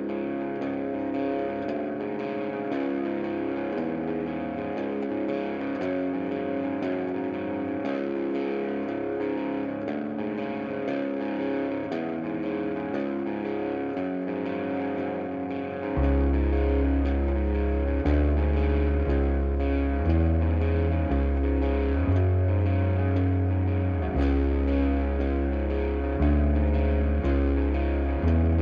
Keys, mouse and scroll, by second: 0.0-2.6 typing, 0.3 click, 1.1-1.5 drag, 1.5 right click, 1.7 click, 2.5 click, 3.3 click, 3.7 f, 4.1-4.4 scroll down 1, 4.4 click, 4.8 f, 5.3-6.1 shift+middle drag, 6.1 click, 6.5 f, 7.4 click, 7.7 shift+drag, 8.0 shift+drag, 8.2 shift+click, 8.7 f, 9.2 click, 9.6 f, 10.0 ctrl+z, 10.2 shift+click, 10.6 f, 10.8 click, 11.1 f, 11.8-12.1 shift+middle drag, 12.1 click, 12.4 f, 12.8 ctrl+z, 13.4 shift+click, 13.9 f, 14.2 click, 14.4 f, 15.2-16.3 shift+middle drag, 16.3 scroll up 1, 17.0 click, 17.5 shift+click, 17.6-18.2 right drag, 18.2 click, 18.3 g, 19.2 click, 19.8 f, 20.1 click, 20.7 f, 21.2 ctrl+z, 21.7 shift+click, 22.1 f, 22.4 click, 23.0 f, 25.0 ctrl+z, 25.9 scroll up 1, 26.2-26.8 shift+middle drag, 26.5 scroll up 1, 26.8 click, 27.0 g, 27.9 shift+click, 28.1-28.6 right drag.